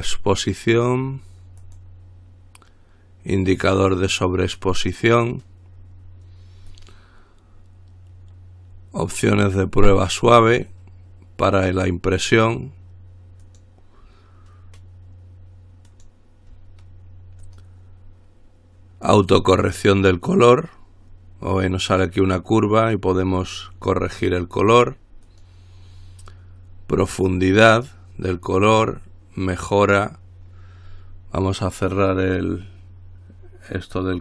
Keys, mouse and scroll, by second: 1.8 click, 3.7 click, 6.9 click, 9.5 click, 11.8 click, 13.6 click, 16.1 click, 17.7 click, 19.3 click, 25.5 click, 27.4 click.